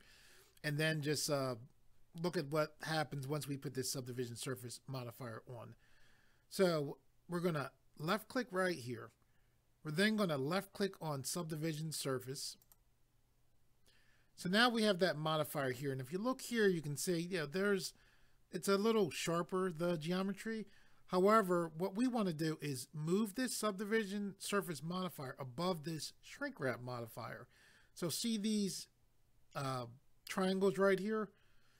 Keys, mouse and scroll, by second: 8.0 click, 12.6 click.